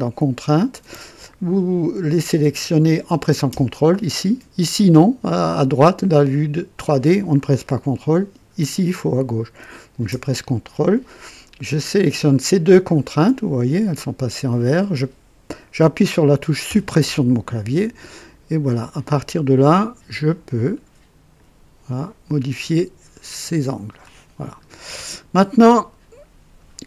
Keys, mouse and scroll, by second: 12.7 click, 16.6 Delete, 18.4 right click, 19.1 right click, 20.7 click, 22.7-24.2 drag, 24.8 scroll up 1, 25.5 right click.